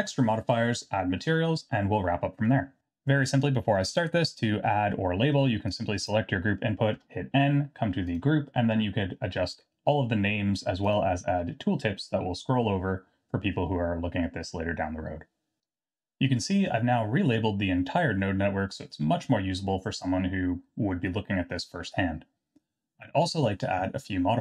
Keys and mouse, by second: 5.9 click, 6.9 n, 8.1 click, 10.9 click.